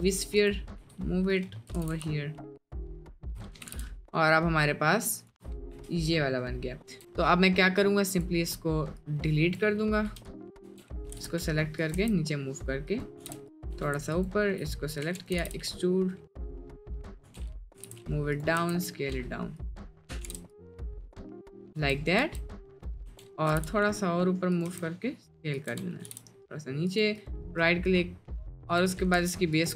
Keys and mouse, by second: 0.4 click, 0.9 g, 1.7 g, 3.6 g, 5.7 KP_Decimal, 6.9 Tab, 9.1 click, 10.1 Delete, 10.7 Tab, 11.1 g, 12.0 s, 13.3 g, 13.7 Tab, 15.1 e, 15.4 g, 18.6 s, 20.3 g, 21.4 click, 21.8 Tab, 22.2 Tab, 22.7 click, 23.1 Tab, 23.5 g, 24.7 s, 25.7 Tab, 26.0 g, 27.3 click, 27.8 middle drag, 28.3 middle click, 29.1 z.